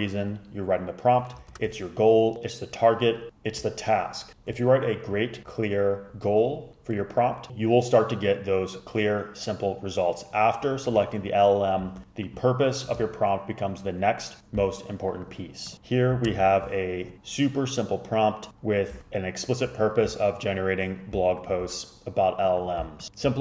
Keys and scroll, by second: 1.6 super+Return, 16.4 super+Return, 19.0 super+a.